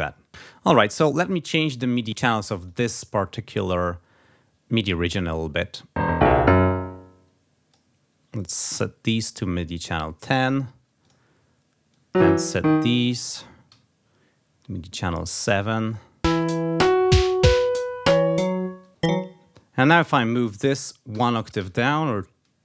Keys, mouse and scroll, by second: 1.8 click, 2.4 click, 5.9-7.8 drag, 8.6 c, 9.6 click, 10.2 click, 10.8 click, 11.7-13.1 drag, 13.5 c, 15.2 click, 15.7 click, 16.2 space, 17.3 click, 18.7 space, 18.9 click, 21.1 alt+Down, 22.5 alt+Up.